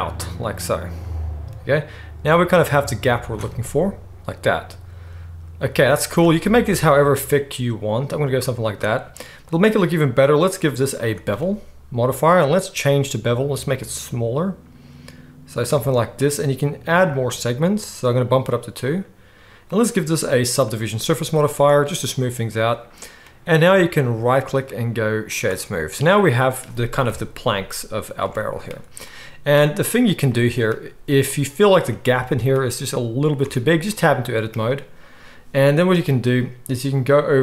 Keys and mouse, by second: 6.2 Tab, 24.4-30.0 middle drag, 27.1 KP_1, 28.2 alt+a, 28.8-30.0 drag, 28.8-32.1 right drag, 32.1-32.5 shift+middle drag, 32.5-33.9 right drag, 33.5 Tab, 33.9-37.4 middle drag.